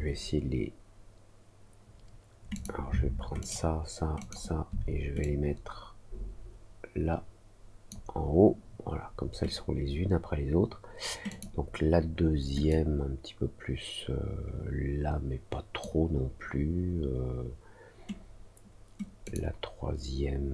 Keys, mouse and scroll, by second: 2.5 click, 3.3 ctrl+click, 4.1 ctrl+click, 5.1-7.8 drag, 11.2 click, 12.6-15.7 drag, 19.2 click.